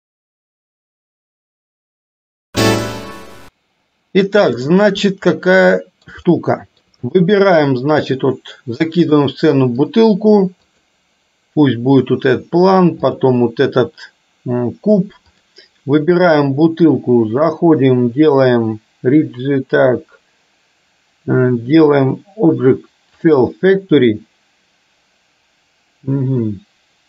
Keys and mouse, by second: 5.5 middle click, 6.3 shift+middle click, 10.7 click, 13.2 click, 17.4-27.0 drag.